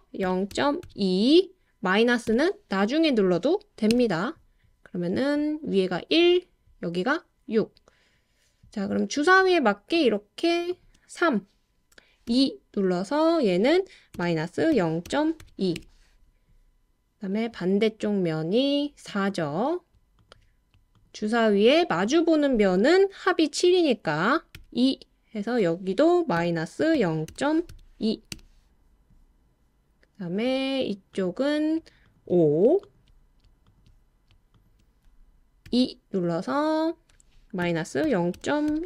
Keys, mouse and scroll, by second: 0.3 0, 0.5 ., 0.8 2, 2.3 -, 3.9 Return, 9.9 shift+click, 12.3 e, 14.1 -, 14.7 0, 15.1 ., 15.4 2, 15.7 Return, 20.9 shift+click, 24.6 e, 26.4 -, 26.9 0, 27.3 ., 27.7 2, 28.3 Return, 34.6 shift+click, 35.7 e, 37.6 -, 38.0 0, 38.3 ., 38.7 2.